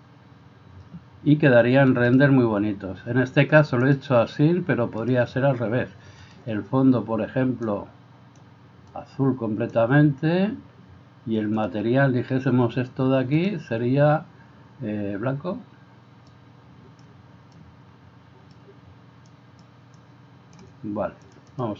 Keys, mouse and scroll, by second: 6.4 drag, 11.6 click.